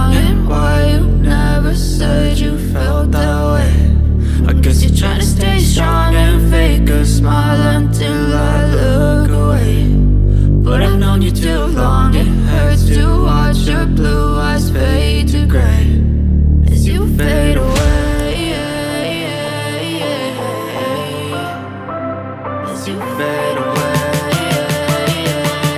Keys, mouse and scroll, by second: 1.6 double click, 1.9 scroll down 1, 2.2 scroll up 1, 2.7 click, 3.8 click, 4.2-4.7 scroll down 1, 4.7-5.0 scroll up 1, 5.0 click, 6.8 click, 7.8 click, 8.1 double click, 8.4 click, 9.8 double click, 11.2 right click, 12.6 click, 13.7 click, 14.9 ctrl+v, 19.8 click, 20.2 click, 20.4 double click, 20.6-21.1 scroll down 1, 22.1 click, 22.5 scroll up 1, 23.1 scroll down 1, 23.9 click, 24.5 right click, 25.6 double click.